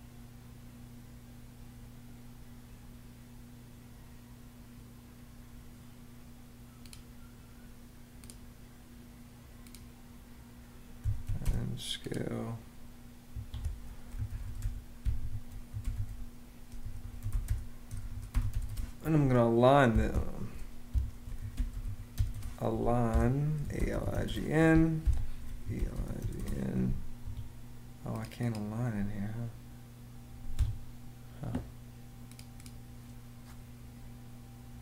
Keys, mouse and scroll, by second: 11.0 c, 11.1 space, 13.0 Escape, 13.6-18.7 typing, 19.8 F14, 19.9-26.4 typing, 20.6 Escape, 22.8 Escape, 24.7 Escape, 26.9 Escape, 30.3 Escape.